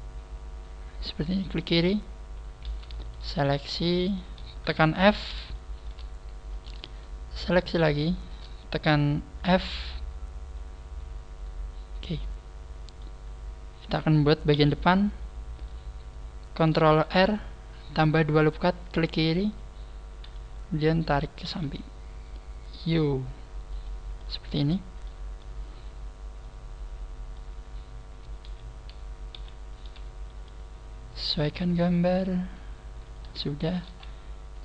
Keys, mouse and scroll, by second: 1.4 click, 2.6 right click, 3.0 shift+right click, 3.6 shift+right click, 4.0 shift+right click, 5.0 f, 5.5 shift+middle click, 6.4 right click, 6.8 shift+right click, 7.6 shift+right click, 8.0 shift+right click, 9.4 f, 9.8 middle click, 14.5 KP_1, 17.0 ctrl+r, 18.8 ctrl+r, 18.9 click, 21.4 g, 23.8 click, 24.2 middle click, 25.4 middle click, 29.3 KP_1, 31.2 g, 33.1 click, 33.6 shift+middle click, 33.9 scroll up 1, 34.5 right click, 34.5 scroll up 2.